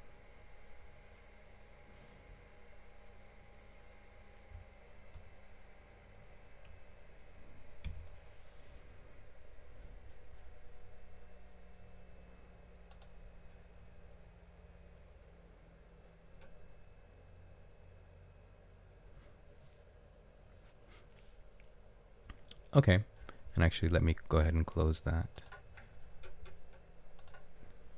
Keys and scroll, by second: 5.2 alt+Tab, 5.7 alt+Tab, 6.2 alt+Tab.